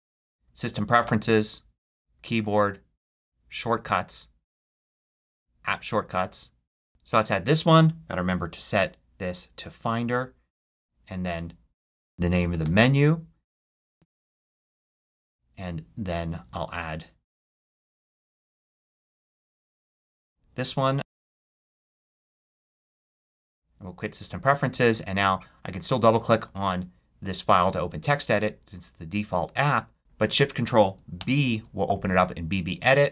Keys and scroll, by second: 11.7-13.2 typing, 13.9 ctrl+shift+b, 18.3-20.2 typing, 20.9 ctrl+shift+c, 23.3 super+q, 29.5 super+q, 31.1 ctrl+shift+b.